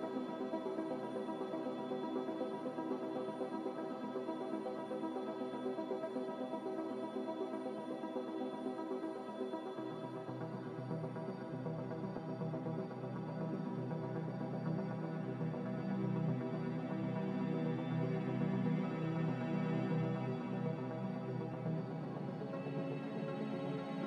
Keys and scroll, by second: 0.4 a.